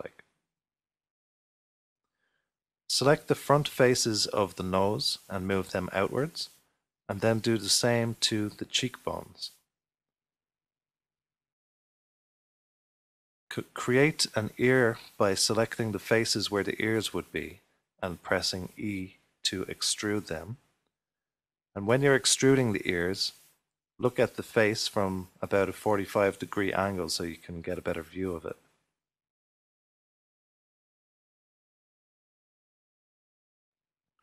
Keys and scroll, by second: 1.1 1, 4.4 typing, 6.3-7.1 typing, 10.6 typing, 12.3 typing, 16.2-17.9 typing, 19.0-19.9 typing, 23.4-25.1 typing, 26.5 typing, 32.8-33.6 typing, 33.6 ctrl+r.